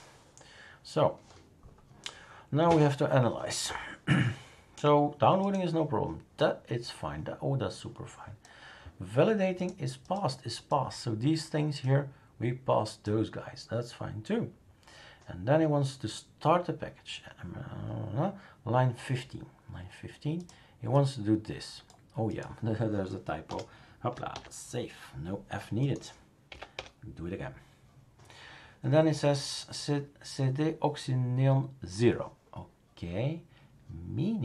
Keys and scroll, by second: 23.5 BackSpace, 24.3 ctrl+s, 26.5 Up, 26.7 Return.